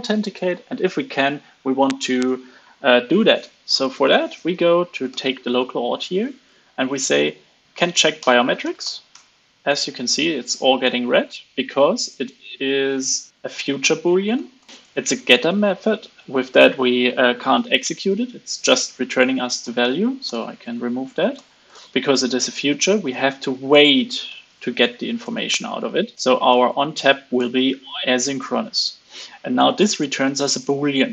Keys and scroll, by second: 4.3 super+v, 13.3 super+b, 13.7 alt+super+Left, 14.3 alt+Left, 14.5 alt+Left, 14.7 super+Right, 14.7 super+b, 18.9 alt+super+Left, 19.5 alt+Right, 19.8 alt+Right, 21.3 alt+Left, 21.6 alt+Left, 25.9 super+z, 26.1 alt+Return, 28.4 super+Left.